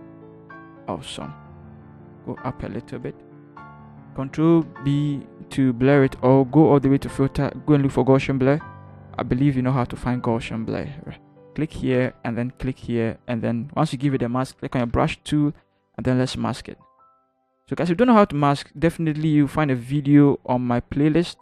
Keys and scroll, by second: 0.5 shift+Return, 2.0 Up, 2.4 Up, 2.9 Up, 4.6 ctrl+b, 15.2 b.